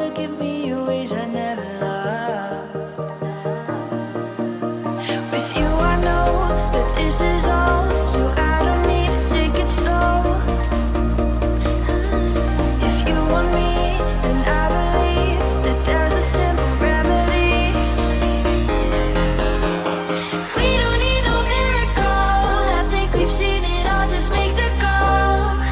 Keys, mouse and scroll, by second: 1.4 typing, 2.7 typing, 3.6 scroll down 1, 4.2 shift+middle click, 4.4 middle click, 4.8 click, 5.3 right click, 6.4 click, 7.5 shift+e, 7.9 space, 8.1 scroll up 1, 8.6 t, 9.0 click, 11.1-11.8 typing, 12.3 Return, 13.4 t, 14.7 click, 15.9 Right, 17.3 click, 17.4 click, 19.3-22.0 typing, 20.9 Return, 22.4 click, 23.3-24.2 typing, 24.6 Return, 25.3 click.